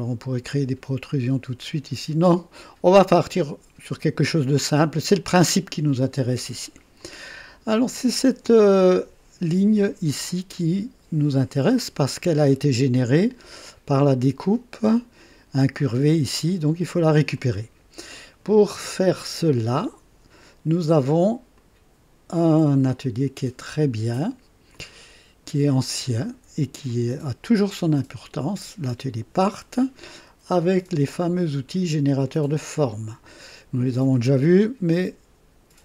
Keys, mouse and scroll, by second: 2.9-4.3 drag, 4.6-5.7 drag, 7.0-7.8 drag, 11.7-13.0 drag, 13.1 click, 16.1 click, 17.3 click, 21.5-23.4 drag, 24.7 click, 26.8 click, 32.9 click, 34.9-35.8 drag.